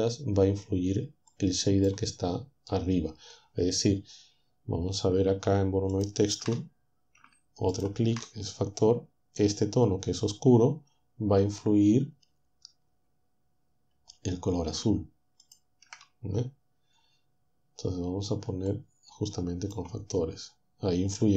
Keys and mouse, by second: 1.3-4.3 drag, 5.9 ctrl+shift+click, 7.7 ctrl+shift+click, 15.4 ctrl+shift+click, 18.7-19.9 drag.